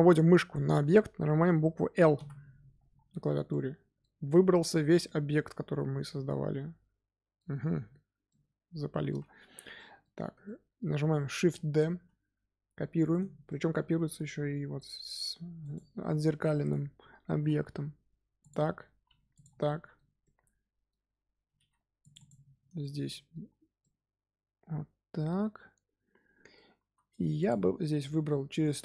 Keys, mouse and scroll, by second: 2.9 scroll down 2, 3.4-9.2 middle drag, 9.2-9.7 scroll up 1, 9.7-11.6 middle drag, 11.6 shift+d, 13.3 scroll down 1, 13.4 middle click, 14.0 g, 15.9-16.3 scroll up 2, 16.3 middle click, 17.2 g, 19.0 g, 19.6-21.5 middle drag, 21.5 ctrl+r, 22.7 shift+middle click, 23.4-23.7 scroll up 2, 23.7-26.7 middle drag, 26.7 3, 27.3 alt+click, 28.0-28.8 middle drag.